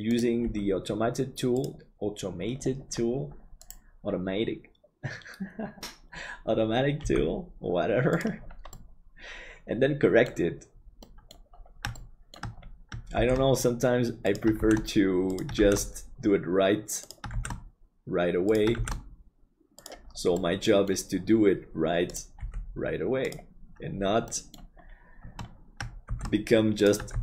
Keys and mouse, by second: 0.4 g, 7.0 g, 8.8-10.3 middle drag, 11.0 middle click, 12.0 shift+middle click, 13.1 shift+d, 20.4 middle click, 22.1 right click, 22.4 g, 24.2 middle click, 26.1 shift+d.